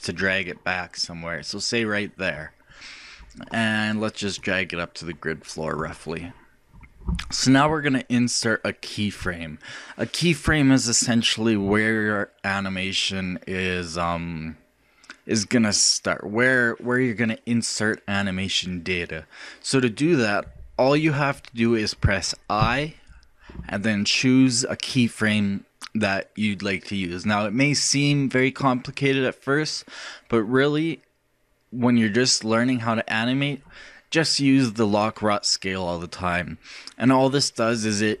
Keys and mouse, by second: 0.2-2.1 drag, 4.4-6.3 drag, 22.6 |.